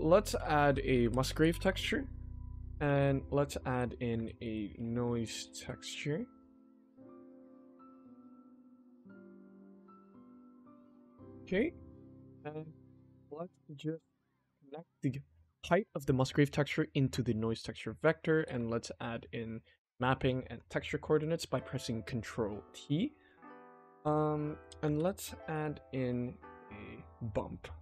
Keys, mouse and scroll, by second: 0.2 shift+a, 2.6 click, 2.8 shift+a, 6.9 click, 7.6 g, 10.1 click, 10.8 shift+middle click, 11.6 click, 12.0 g, 12.7 click, 13.9 shift+middle click, 16.3-17.5 drag, 17.8 middle click, 18.2 click, 18.4 ctrl+t, 19.2-20.2 shift+middle drag, 20.5 click, 21.0 shift+middle click, 23.2-24.4 shift+middle drag, 24.8 shift+a.